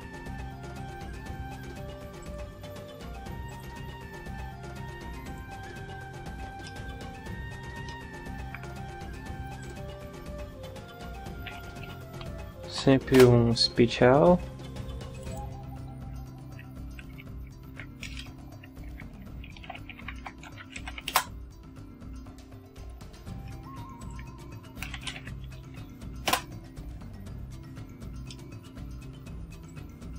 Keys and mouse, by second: 2.2 click, 3.5 click, 5.3 click, 6.7 click, 7.9 ctrl+click, 9.6 click, 11.1-12.3 typing, 12.5 Down, 12.7 Up, 13.1 Return, 15.1 click, 16.8-21.4 typing, 24.0 click, 24.7-25.7 typing, 26.0 Up, 26.3 Return, 28.3 middle click, 29.7-30.1 drag.